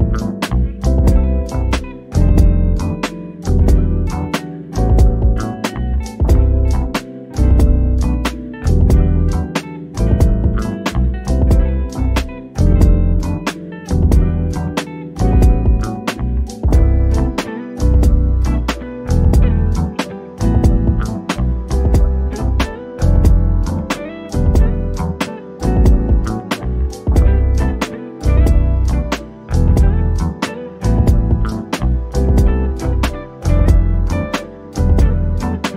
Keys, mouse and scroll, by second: 0.7 click, 2.5-4.7 drag, 4.7-5.0 scroll up 1, 5.0 click, 6.0-6.5 scroll down 1, 6.5-10.3 drag, 10.3-11.1 scroll up 2, 11.6 click, 12.8-13.4 scroll down 1, 13.4 middle click, 14.0-14.7 scroll up 1, 16.1 click, 19.0-19.7 scroll down 1, 22.1 click, 24.0-24.4 scroll down 1, 25.6 click, 28.9 click, 31.9 click.